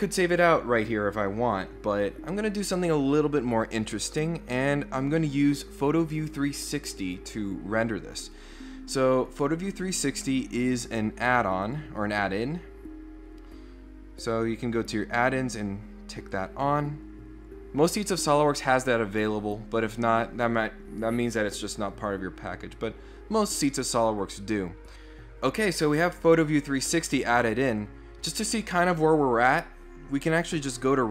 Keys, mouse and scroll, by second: 8.2 click, 11.6 click, 12.3 click, 15.2 click, 16.3 click.